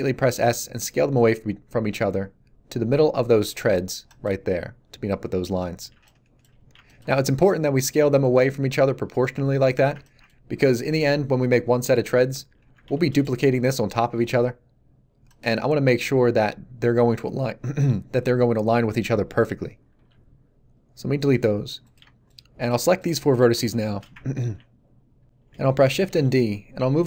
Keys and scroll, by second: 12.4 a, 12.9 shift+d, 19.9 x, 26.0 shift+d.